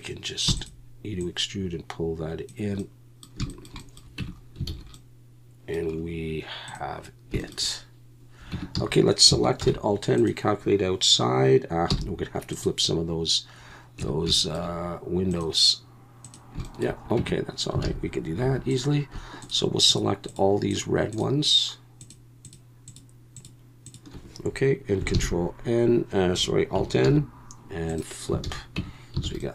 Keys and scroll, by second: 0.5 e, 4.2 Tab, 4.7 alt+a, 8.5 Tab, 8.8 a, 9.6 alt+n, 11.9 m, 14.0 Tab, 17.2 Tab, 17.8 alt+a, 18.4 3, 25.1 ctrl+n, 27.0 alt+n, 28.4 alt+a, 28.8 Tab, 29.2 alt+a.